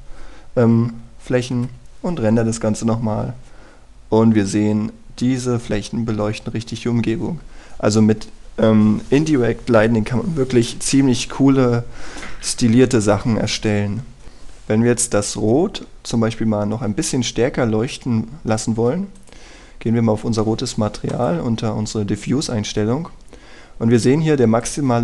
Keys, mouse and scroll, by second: 1.3 scroll down 1, 1.5 scroll up 1, 2.6 F12, 4.9 scroll down 1, 5.1-6.8 scroll up 1, 15.2-17.0 scroll down 1, 17.9 Escape, 18.3-20.2 scroll up 1, 20.2 click, 20.7 scroll down 1, 21.2-22.1 scroll up 1, 22.1-25.0 drag.